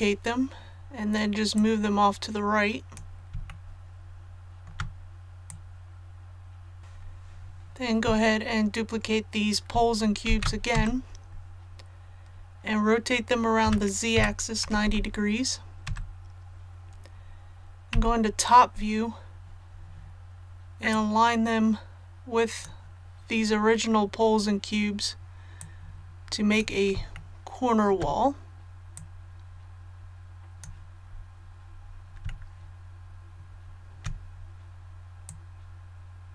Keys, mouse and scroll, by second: 1.5 click, 3.4 shift+middle click, 5.4 click, 10.2 shift+d, 13.6-14.6 typing, 17.9 KP_7, 20.9-26.9 drag, 27.1 shift+middle click, 27.2-27.5 scroll down 1, 27.5-27.8 shift+scroll down 1, 28.9-30.9 drag, 30.9 scroll down 1, 31.0-31.7 scroll up 1, 32.2 shift+middle click, 35.2-36.3 drag.